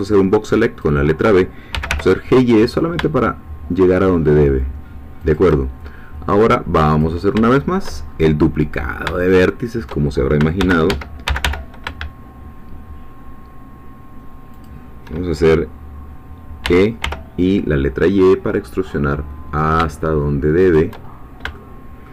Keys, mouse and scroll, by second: 1.7 g, 1.9 y, 5.2 shift+click, 7.0 click, 7.5 shift+middle click, 8.1-8.4 shift+scroll up 2, 8.7-9.1 scroll down 2, 9.1-10.3 shift+middle drag, 10.6 shift+d, 10.9 Escape, 11.3 g, 11.4 y, 14.5 shift+click, 16.7 e, 17.0 y, 20.6 shift+click, 21.1 shift+scroll down 2, 21.2 shift+middle click, 21.5 shift+middle click.